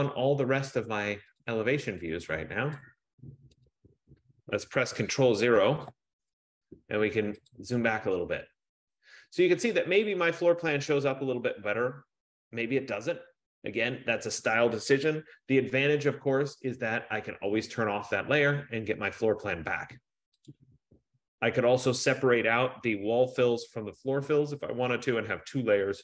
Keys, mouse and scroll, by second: 1.6 click, 2.3 click, 3.0 click, 3.9 click, 6.0 ctrl+0, 7.7 click, 10.1 click, 18.0 click, 20.6 click.